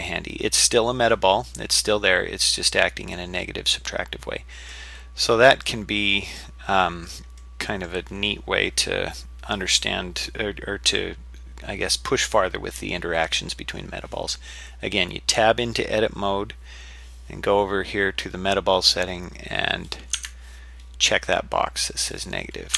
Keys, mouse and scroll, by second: 5.1-6.0 scroll down 3, 5.7-6.7 middle drag, 6.8-7.1 scroll up 3, 7.4 middle click, 17.0-17.8 scroll down 1, 20.2 Tab.